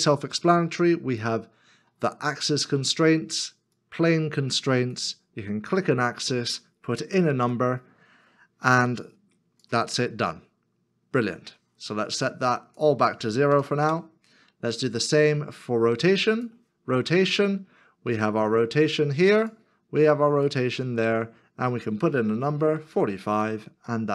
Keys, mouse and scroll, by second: 7.4 click, 10.1 click, 10.9-12.2 scroll down 1, 13.5 0, 13.8 Return, 15.0 scroll up 1, 22.8 click.